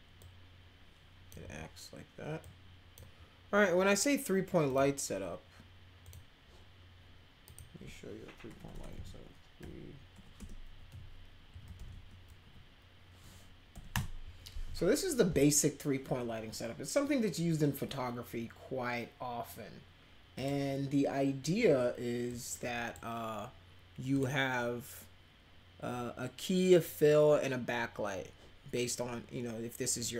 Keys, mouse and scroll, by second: 0.2-1.3 drag, 1.4 w, 2.4 click, 4.7 click, 6.0 click, 7.4 click, 8.5-12.4 typing, 13.7 Down, 13.9 Return, 20.3 click, 22.3 click, 24.1 click.